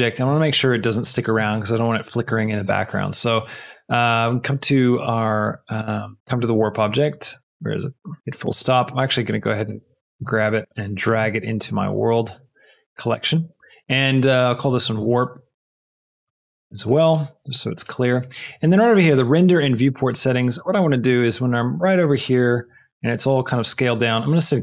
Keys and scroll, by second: 14.6 shift+w, 15.0 r, 15.6 p, 16.3 Return.